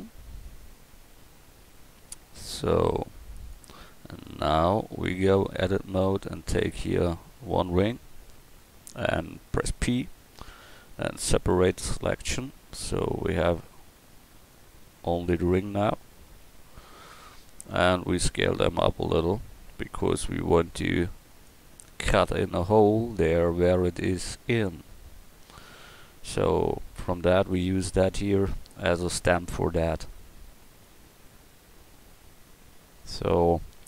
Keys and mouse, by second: 5.3 Tab, 6.4-8.6 drag, 9.9 p, 12.7 Tab, 13.4-14.5 drag, 15.6 drag, 16.3 KP_1, 18.2 s, 28.4-29.5 middle drag, 29.5-30.9 drag, 31.1 drag, 31.4 right click, 31.6 click, 33.0-33.5 middle drag.